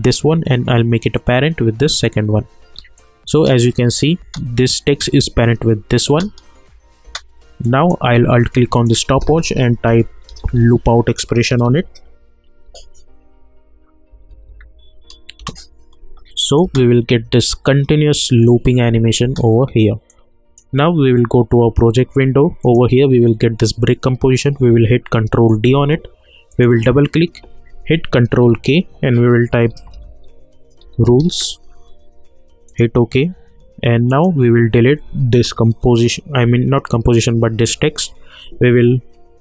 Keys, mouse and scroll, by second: 3.3 space, 6.1 space, 7.6 click, 8.7 alt+click, 9.6-10.9 typing, 12.6 o, 14.1 Down, 15.4 Return, 16.4 click, 16.6 space, 19.2 space, 20.1-22.6 drag, 24.8 ctrl+-, 24.8 ctrl+Num_Lock, 25.3 ctrl+d, 26.5 click, 28.3 ctrl+k, 29.4-31.7 typing, 32.7 click.